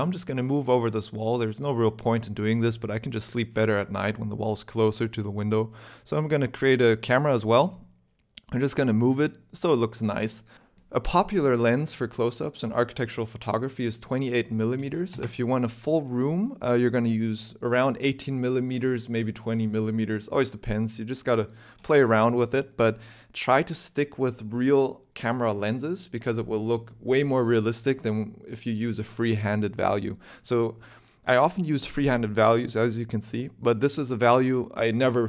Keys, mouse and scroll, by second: 0.0 shift+middle click, 0.0 scroll up 3, 0.5 3, 0.8 click, 0.9 shift+click, 1.2 click, 1.8 g, 3.8 Tab, 4.3 shift+middle click, 4.5 middle click, 5.2 shift+a, 6.6 scroll down 1, 7.1 scroll up 1, 7.6 KP_0, 7.9 t, 8.0 n, 8.7 n, 9.5 click, 10.1 click, 10.5-11.2 scroll down 9, 11.2 scroll up 4, 11.5 shift+middle click, 11.9 middle click, 13.1 click, 14.5 click.